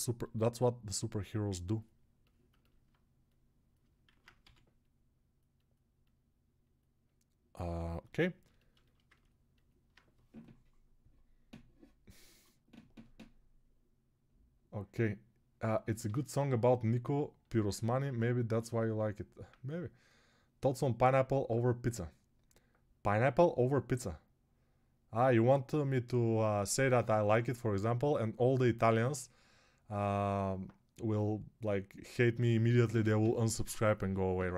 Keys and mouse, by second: 2.7-8.6 right drag, 4.0 alt+q, 4.3 g, 8.6 alt+shift+click, 8.7 shift+right click, 8.8 alt+click, 8.9 ctrl+alt+right click, 9.1-34.5 alt+drag.